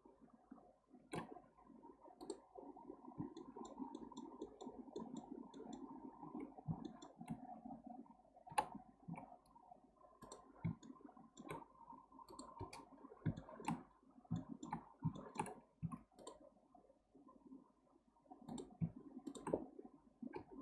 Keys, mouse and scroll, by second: 1.4 x, 2.6-3.4 scroll down 1, 3.4-8.5 shift+middle drag, 8.5 k, 10.8-13.9 shift+middle drag, 13.9-14.4 scroll up 1, 14.4-14.8 shift+middle drag, 14.8-15.2 scroll up 1, 15.2-15.8 shift+middle drag, 15.8 1, 16.2 click, 18.5 click, 19.3 shift+drag, 20.3 m.